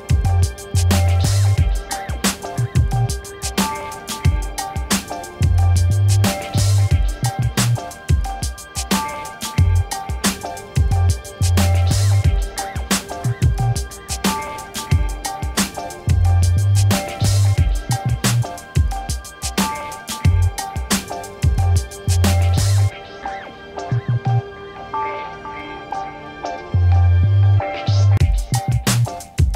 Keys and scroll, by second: 6.2 ctrl+-, 17.8 c, 19.4 Return, 20.4 v, 27.0 1, 29.1 1.